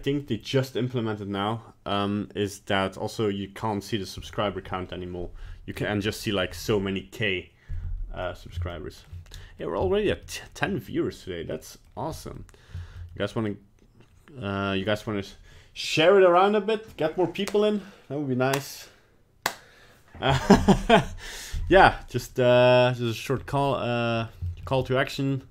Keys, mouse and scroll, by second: 5.7 middle click, 6.0 middle click, 6.2 middle click, 8.2 middle click, 8.3 middle click, 8.4 middle click, 8.7 shift+middle click, 8.9 shift+middle click, 9.1 shift+middle click, 9.3 middle click, 9.8 shift+middle click, 10.2 middle click, 10.7 middle click, 11.5 middle click, 11.7 shift+middle click, 12.1 middle click, 12.3 middle click, 12.8 shift+middle click, 13.2 middle click, 14.7 middle click, 14.7 shift+middle click, 14.7 scroll down 1, 22.0 middle click, 22.7 middle click, 23.1 scroll down 1, 23.3 scroll up 1, 23.6 middle click, 24.4 shift+middle click, 24.6 shift+middle click, 24.7 middle click.